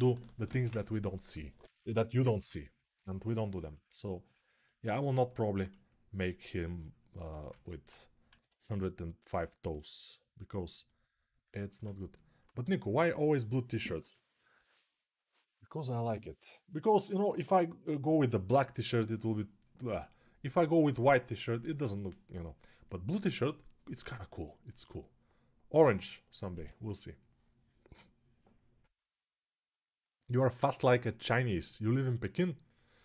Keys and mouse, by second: 8.2-33.0 alt+right drag.